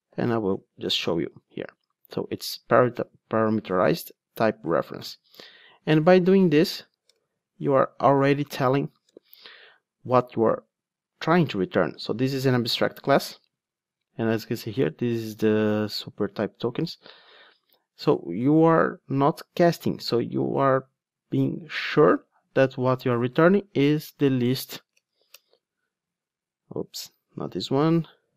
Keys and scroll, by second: 12.7 super+b, 23.1 ctrl+Tab, 24.9 alt+Return, 26.7 super+z.